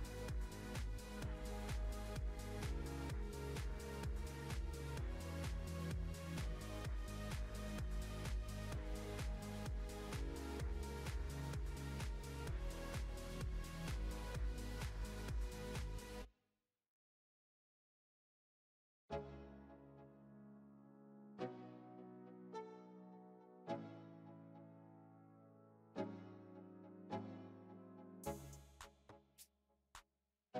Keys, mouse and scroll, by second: 0.7 click, 4.5 scroll up 5, 4.9-5.5 middle drag, 5.5-6.3 scroll up 2, 6.3 scroll up 1, 6.3 click, 7.2-7.7 scroll down 6, 7.7-8.5 shift+middle drag, 8.5-9.2 scroll down 5, 9.2-12.0 drag, 12.0-12.8 middle drag, 12.8 scroll up 1, 14.6 s, 20.0 shift+middle click, 20.8 Tab, 21.8 1, 22.2 click, 23.4 click, 26.5-27.3 scroll down 5, 27.3 click, 28.0 Tab, 28.2 click, 29.7-30.5 middle drag.